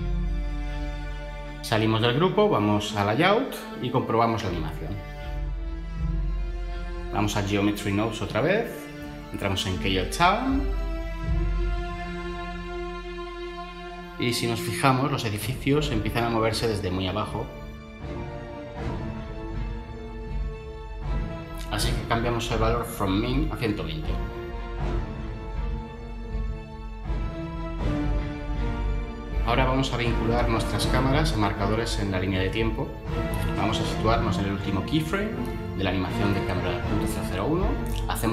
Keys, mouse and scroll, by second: 0.0-0.8 typing, 1.0 Return, 1.5 Tab, 11.1 Tab, 23.1-23.9 typing, 25.4 0.